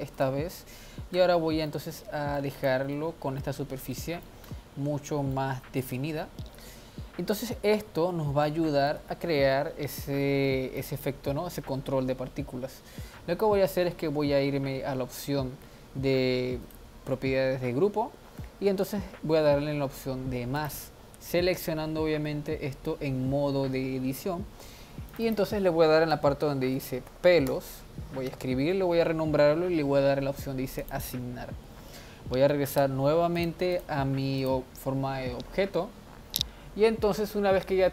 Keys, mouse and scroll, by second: 1.1 Tab, 2.6 click, 3.0 middle click, 3.6 Tab, 4.0-4.6 middle drag, 4.6-5.4 scroll up 3, 5.4-6.0 middle drag, 6.0 Tab, 6.5-8.5 scroll down 1, 8.5 middle click, 9.0 a, 10.7 click, 16.6 click, 20.6-23.9 drag, 25.1-28.3 drag, 30.8-32.8 drag, 32.8 Tab, 33.4 drag, 33.7 click, 34.4 click.